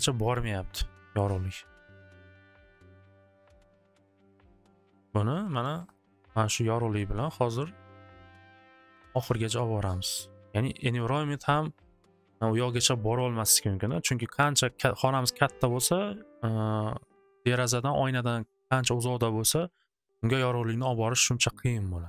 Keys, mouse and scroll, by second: 3.2 click, 3.9 click, 4.1 alt+w, 4.3 alt+w, 5.0 middle click, 5.9 right click, 6.6 right click, 6.9 alt+w, 7.1 click, 10.2 click, 10.7 click.